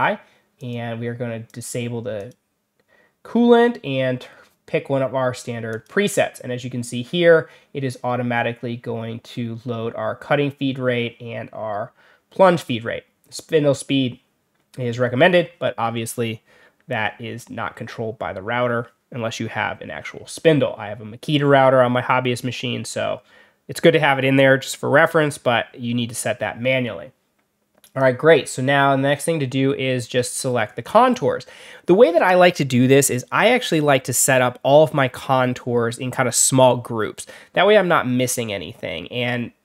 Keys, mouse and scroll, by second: 0.5 click, 1.4 click, 2.1 click, 5.6 click, 27.7 click, 29.9 middle click.